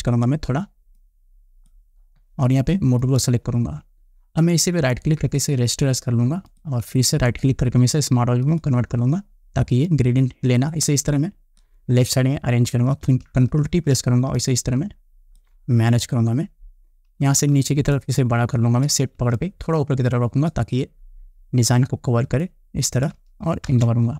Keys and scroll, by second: 13.4 ctrl+t.